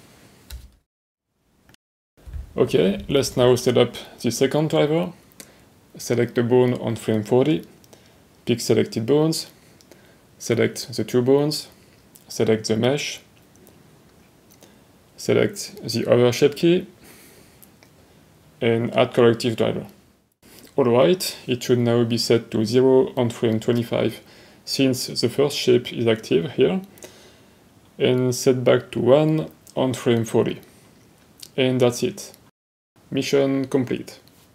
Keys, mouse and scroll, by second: 0.6 ctrl+z, 1.6 click, 4.5 right click, 6.1-8.2 right drag, 8.2-9.2 middle drag, 9.6 right click, 10.9 shift+click, 12.4 middle click, 13.9 click, 15.0 right click, 19.1 right click, 20.8 middle click, 25.9 click, 29.9 right click.